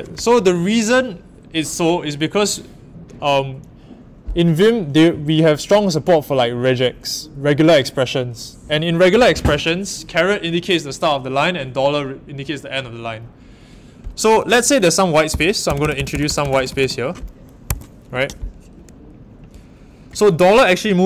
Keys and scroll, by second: 17.6 Escape.